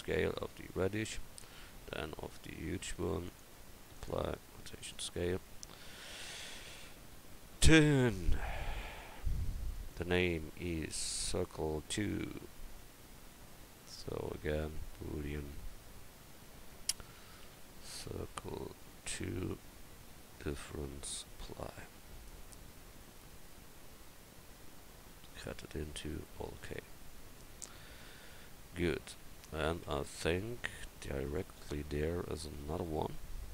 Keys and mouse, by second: 0.4-1.1 middle drag, 1.6-1.9 middle drag, 1.9-3.2 right drag, 4.9-6.9 drag, 8.3-12.2 right drag, 13.1-15.0 right drag, 14.0-25.6 drag, 22.1-24.3 right drag, 24.7-26.1 middle drag, 24.7-25.6 right drag, 26.7 middle click, 29.2 KP_1.